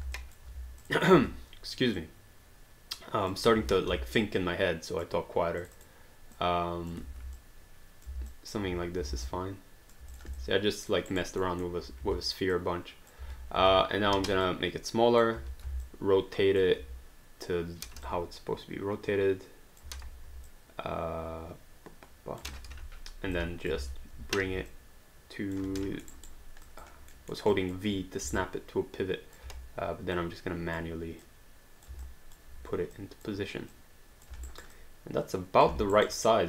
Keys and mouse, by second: 0.2 alt+click, 3.6 ctrl+z, 4.2 click, 5.6 click, 7.4 click, 8.3 alt+click, 9.1 alt+d, 9.3 alt+click, 10.1 click, 10.9 alt+click, 11.1 alt+right click, 11.4 alt+middle click, 12.0-15.4 typing, 12.6 click, 14.4 click, 15.8 alt+click, 18.0 j, 18.0 click, 19.8 j, 20.5 click, 22.4 j, 23.3 alt+click, 23.7 click, 23.8 w, 24.5 v, 24.7 click, 25.6 v, 26.0 alt+middle click, 26.1 alt+right click, 26.6 alt+click, 27.3 alt+middle click, 27.5 alt+click, 28.3 v, 28.4 click, 29.4 v, 30.1 click, 31.2 click, 32.1 alt+click, 33.0 click, 34.5 alt+right click, 34.7 alt+click, 35.7 alt+d, 35.9 alt+right click, 36.1 alt+click.